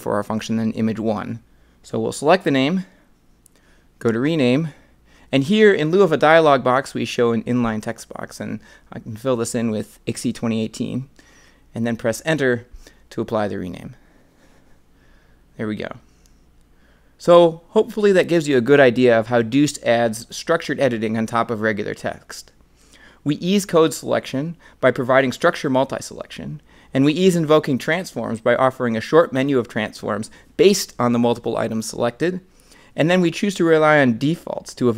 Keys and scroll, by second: 14.8 Return.